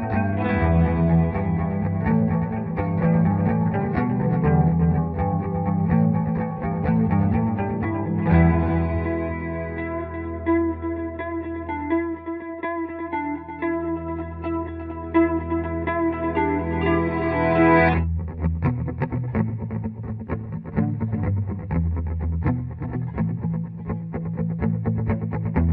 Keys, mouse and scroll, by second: 1.3 F4, 2.4-5.9 drag, 7.7-8.3 typing, 8.0 click, 9.2 F2, 9.3-11.7 drag, 11.7-16.6 drag, 16.6 click, 17.0 F12, 18.2 click, 24.9-25.7 drag.